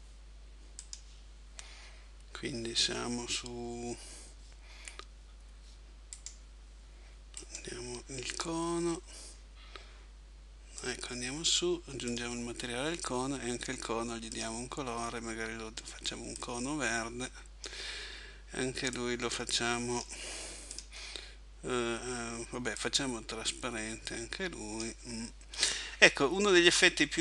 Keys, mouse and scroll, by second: 0.8 click, 6.2 right click, 10.8 click, 14.3 click, 19.0 click.